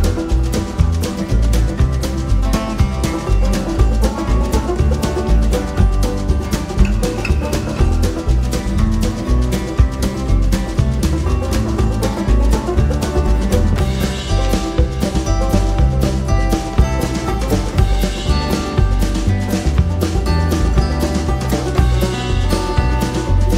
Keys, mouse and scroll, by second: 0.1 click, 0.8 click, 2.9 shift+F6, 6.2 click, 8.9-10.6 drag, 11.1 click, 11.8 click, 12.6-13.9 drag, 14.6 click, 15.9 click, 16.8 click, 17.8-19.3 drag, 19.9-21.5 drag, 22.4 click.